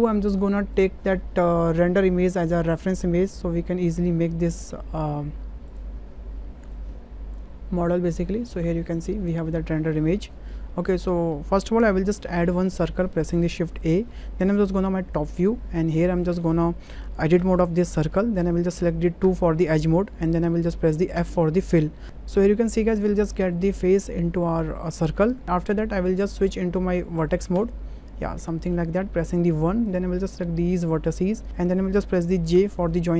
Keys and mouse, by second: 0.9-2.3 drag, 2.8-4.6 drag, 5.8-7.3 drag, 8.7 shift+middle click, 9.6 shift+middle click, 10.6-11.2 shift+middle drag, 12.1 shift+a, 16.0 shift+middle click, 17.4 Tab, 19.2 2, 21.1 f, 22.0 ctrl+z, 27.5 1, 29.9 click, 32.5 j.